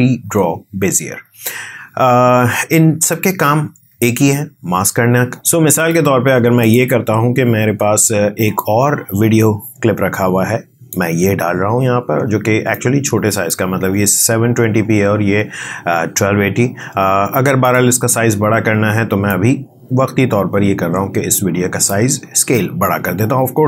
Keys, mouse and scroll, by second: 5.7-23.6 drag.